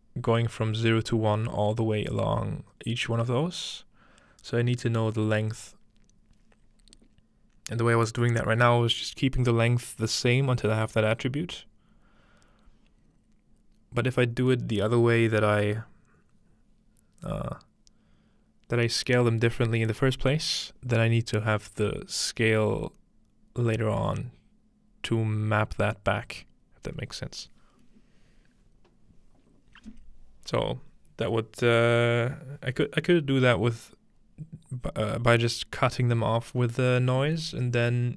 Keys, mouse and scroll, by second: 8.0-10.3 middle drag, 14.0-17.1 middle drag.